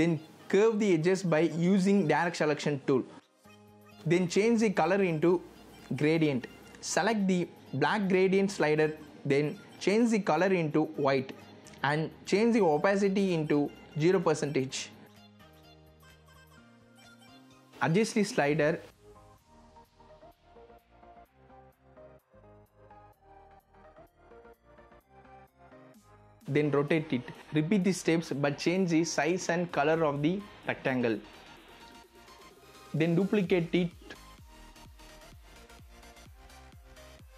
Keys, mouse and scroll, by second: 11.5 KP_0, 13.3 click, 16.4-19.8 drag, 23.2 z, 23.4 click, 25.2 v, 25.9 click, 33.5 z, 33.7 click, 36.4 click.